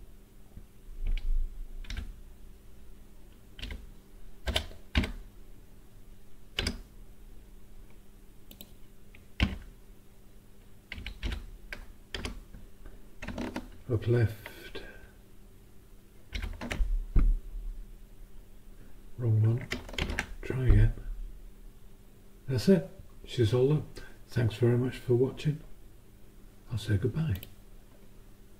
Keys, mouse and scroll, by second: 1.0 Down, 1.9 Up, 3.6 Left, 4.5 BackSpace, 4.9 5, 6.6 Return, 8.5 click, 9.4 Down, 10.9 Down, 11.2 Up, 12.2 Return, 16.3 ctrl+shift+Up, 20.0 ctrl+Return, 27.3 click.